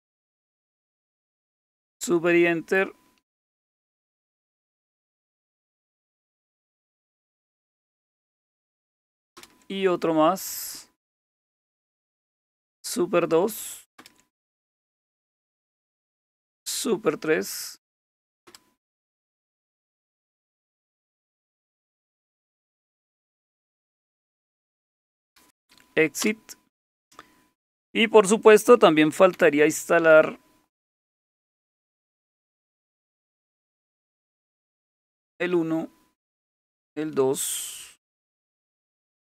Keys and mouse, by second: 0.7 super+Return, 4.4-5.2 typing, 6.9-7.6 typing, 9.3 super+Return, 11.9-12.8 typing, 14.0 super+Return, 16.6 super+3, 18.5 super+Return, 22.5 Return, 22.7 Return, 22.8 Return, 23.1-26.0 typing, 24.6 Return, 26.2 Return, 29.3 super+Left, 31.4 super+Left, 31.8 super+Left, 33.8 super+1, 35.6 super+2, 38.4-39.3 typing.